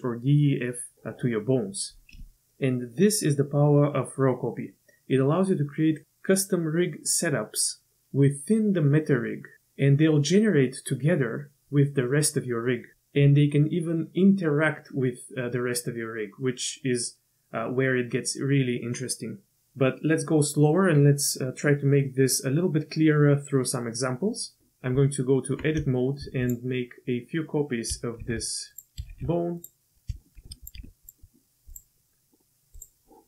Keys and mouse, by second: 24.9 Tab, 25.9 shift+middle drag, 26.5 click, 27.1 middle click, 28.2 shift+d, 29.2 shift+d, 30.1 shift+click, 30.4 shift+d, 30.9 shift+d, 31.7 click.